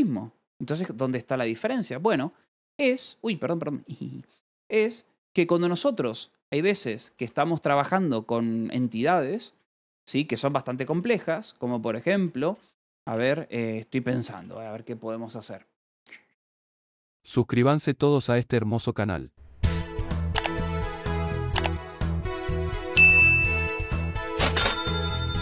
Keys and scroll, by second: 2.2 :, 3.2 Return, 6.0 u, 6.7 j, 7.6 k, 8.2 j, 9.4-14.3 typing, 9.6 Return.